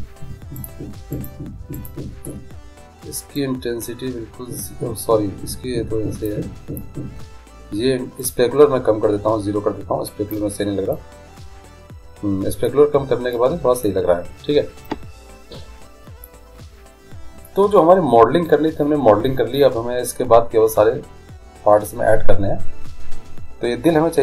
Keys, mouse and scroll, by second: 3.5-5.4 drag, 7.1-8.4 middle drag, 8.4-10.3 drag, 11.1 middle click, 16.5-18.2 middle drag.